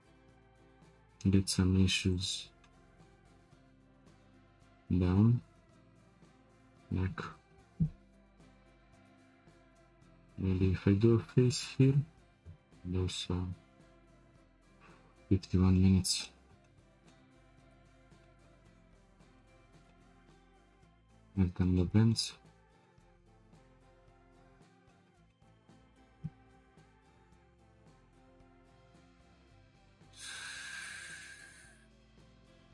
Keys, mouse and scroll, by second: 8.4 2, 8.8 click, 9.5 shift+click, 10.6 f, 11.5-12.4 shift+middle drag, 12.4 ctrl+r, 13.9 1, 14.2 click, 14.3-21.2 middle drag, 21.2-21.8 scroll up 2, 21.8-22.5 middle drag, 22.5-22.8 scroll down 2, 22.8-23.7 shift+middle drag, 23.7-24.1 scroll up 2, 24.1 click, 24.9-26.0 shift+middle drag, 26.0 scroll down 3.